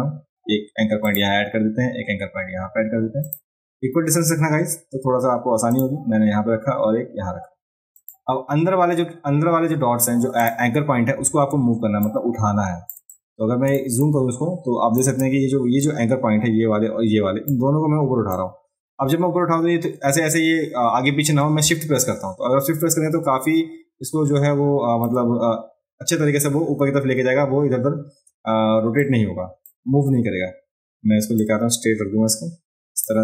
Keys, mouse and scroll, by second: 1.1 click, 3.3 click, 5.7 click, 8.0 click, 10.4 click, 11.5 ctrl+space, 12.0 ctrl+click, 13.1 click, 14.0-15.0 ctrl+drag, 15.8-17.5 drag, 18.3-25.1 drag, 29.0 click, 31.4-33.1 drag.